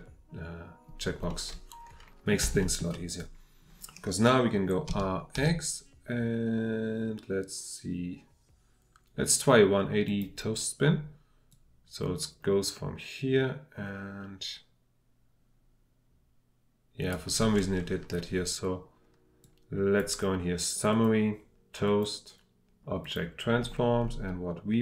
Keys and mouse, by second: 1.3-2.3 middle drag, 2.6 shift+middle drag, 4.9 r, 5.4 x, 10.1 click, 11.6-17.1 drag, 19.4 click.